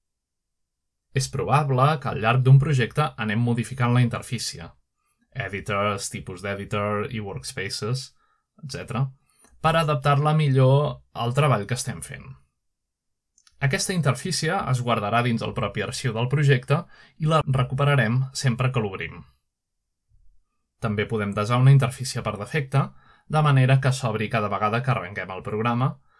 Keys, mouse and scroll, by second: 0.9-1.5 drag, 2.2 click, 2.8 drag, 3.3-4.5 drag, 4.5 shift+middle drag, 4.9 shift+middle click, 5.5-6.3 shift+middle drag, 6.4-8.3 drag, 9.2 click, 10.8-11.4 drag, 10.8 typing, 11.9-13.1 shift+middle drag, 13.1 click, 14.7 click, 16.7 click, 18.5 shift+middle click, 23.5 click.